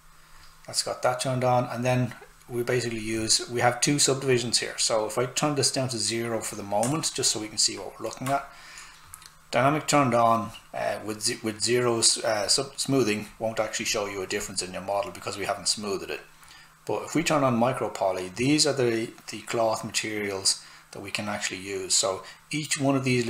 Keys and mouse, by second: 4.3 click, 6.9 alt+right click, 9.8 click, 17.2 click.